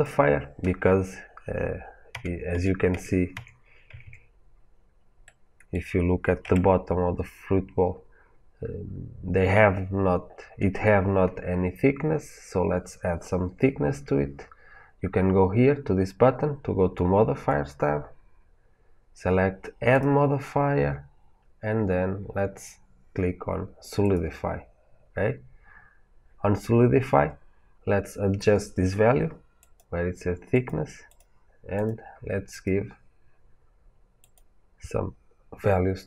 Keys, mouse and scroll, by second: 2.0 a, 4.5-4.9 scroll up 1, 5.1-19.8 middle drag, 6.3 Tab, 19.8-35.1 drag.